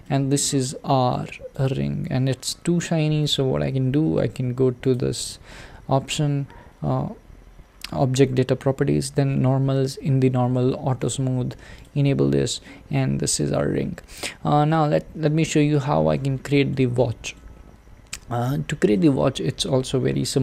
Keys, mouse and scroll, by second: 0.0-1.6 middle drag, 1.6 click, 2.5 scroll up 1, 11.0 click, 11.8 click, 12.1-12.6 scroll down 3, 12.6-14.8 middle drag, 14.8-15.6 scroll down 1, 15.6 scroll down 1, 15.8-20.2 shift+middle drag, 20.2-20.4 scroll down 2.